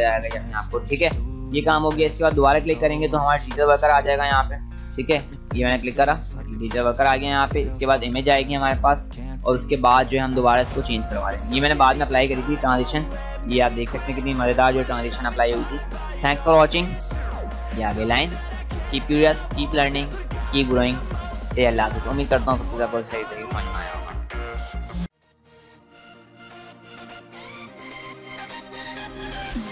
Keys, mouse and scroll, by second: 2.2 click, 5.1 click, 16.8 click.